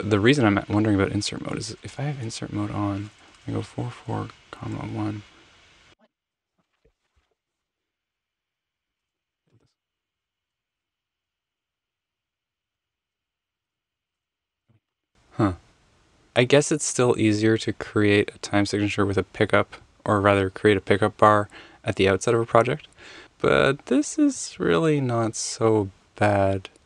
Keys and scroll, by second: 1.9 Return, 3.6 Tab, 4.4 ,, 4.6 1, 4.9 Return, 9.0 super+z, 9.5-15.0 typing, 10.4 Left, 10.4 Left, 13.1 super+z, 13.3 super+z, 14.6 super+z, 16.2 super+z.